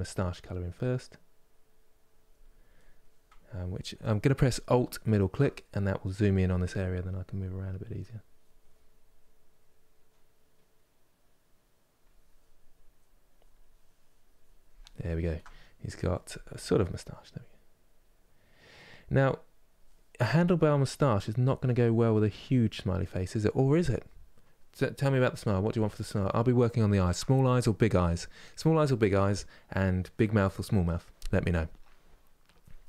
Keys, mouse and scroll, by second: 2.5-4.9 middle drag, 5.3-6.9 middle drag, 6.9-11.7 drag, 12.4-14.7 drag, 14.7-17.0 ctrl+middle drag, 17.0-25.1 drag, 25.1-32.8 middle drag.